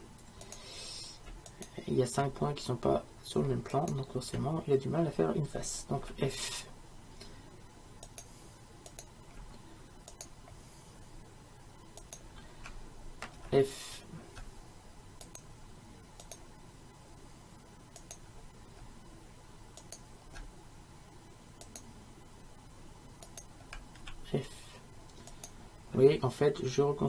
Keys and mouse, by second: 0.5-6.0 right drag, 6.1 f, 8.1-10.1 right drag, 13.4 f, 19.7-24.1 right drag, 24.1 f, 25.2-27.0 right drag.